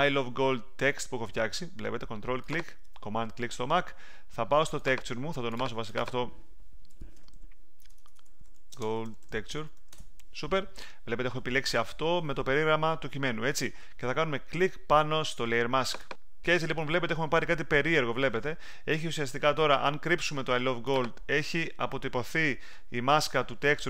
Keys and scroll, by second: 6.6-10.2 typing.